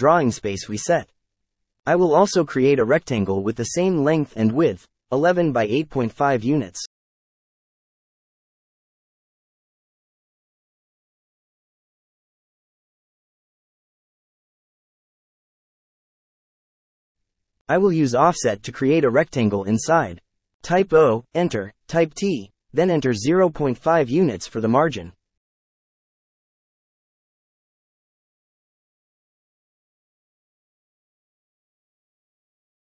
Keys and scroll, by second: 1.5-2.7 typing, 3.1 Return, 6.2 shift+3, 8.1 KP_0, 8.2 ,, 8.3 KP_0, 9.1 Return, 10.8 shift+3, 12.7 KP_1, 13.3 ,, 14.4 KP_8, 14.9 KP_Decimal, 15.1 KP_5, 16.2 Return, 19.4 o, 22.1 Return, 24.5 t, 25.3 Return, 31.4 KP_0, 31.6 ., 31.9 KP_5, 32.3 Return.